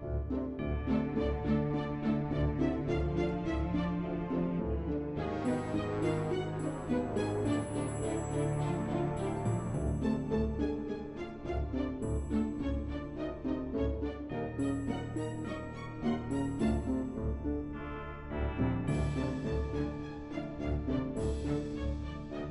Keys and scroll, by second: 14.4-17.6 typing.